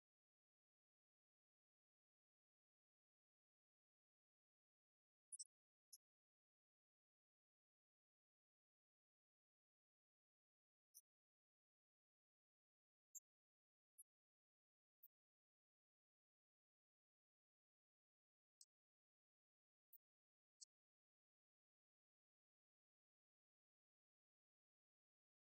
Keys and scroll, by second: 0.5 Left, 1.6 alt+Down, 2.6 Up, 3.7 Down, 7.1 Up, 8.9 Return, 9.4 shift+Down, 10.2 ctrl+d, 10.6 Right, 14.6 Right, 17.0 Right, 17.2 Left, 23.7 2, 24.0 Return, 25.0 shift+Down.